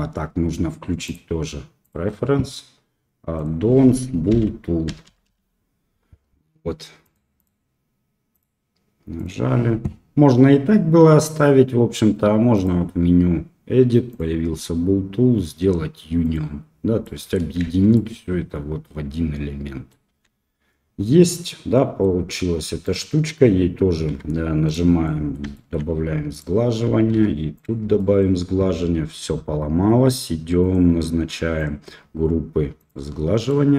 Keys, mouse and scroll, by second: 17.0 middle click, 17.6 shift+z, 17.9-19.9 middle drag, 20.2 shift+z, 21.1 click, 21.2 middle click, 22.8 click, 24.0 q, 25.0 middle drag, 25.5 shift+middle click, 26.3 click, 27.9 middle click, 30.6 click, 31.5 click, 32.7 click, 33.4 middle drag.